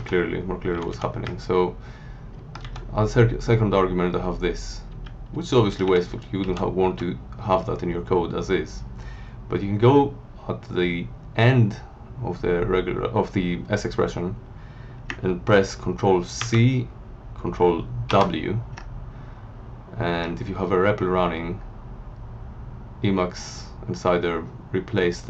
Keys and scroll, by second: 0.7 Down, 1.2 Right, 2.6 Left, 4.9 Down, 6.4 End, 6.8 Left, 16.4 ctrl+c, 18.1 ctrl+w.